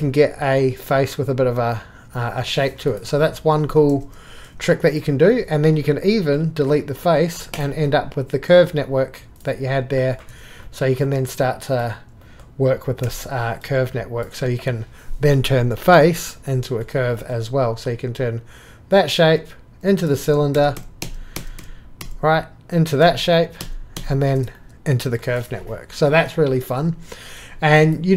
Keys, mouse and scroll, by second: 0.1-2.5 drag, 2.9 click, 4.9 click, 6.7 click, 7.5 click, 8.6-9.3 middle drag, 9.4-10.1 drag, 10.2 middle click, 10.7-11.3 middle drag, 11.5 click, 12.2-13.0 middle drag, 14.3 click, 14.3 Escape, 20.2 ctrl+z, 21.0 ctrl+z, 21.6 ctrl+z, 26.1 click.